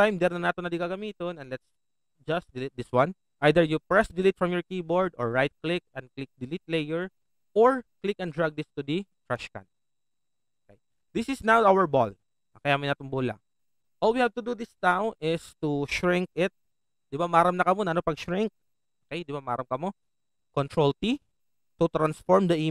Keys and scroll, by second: 20.7 ctrl+t.